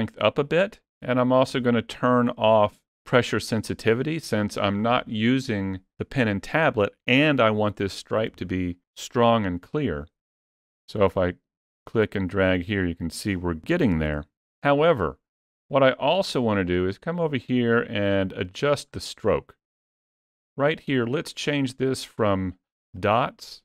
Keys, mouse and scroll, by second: 0.4 click, 3.8 click, 10.8 click, 14.0 ctrl+z, 16.5 middle click, 19.8 click.